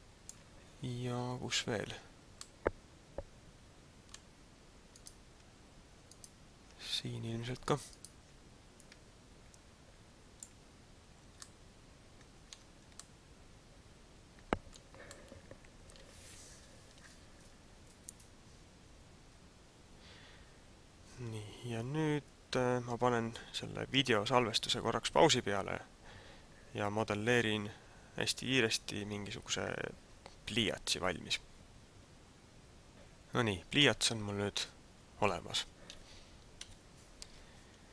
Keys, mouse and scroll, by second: 2.4 middle click, 4.9 right click, 6.2 shift+right click, 8.0 shift+right click, 8.8 click, 9.4 click, 11.4 middle click, 12.6 Tab, 13.0 middle click, 15.1 middle click, 20.8-21.2 scroll down 2, 34.0 middle click, 36.6 KP_Divide.